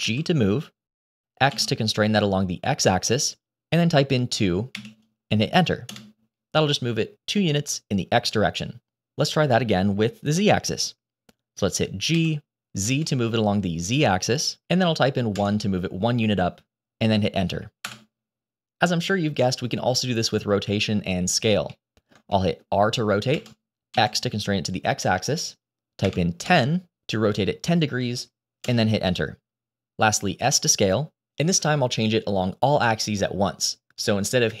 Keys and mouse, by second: 12.0 g, 21.7 middle drag, 22.2 shift+middle drag, 23.2 r, 29.9 s.